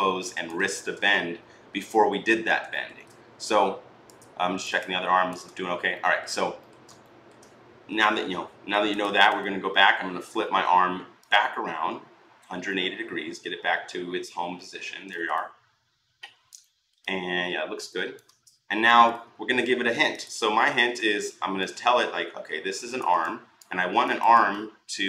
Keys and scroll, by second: 0.4 ctrl+z, 10.1 r.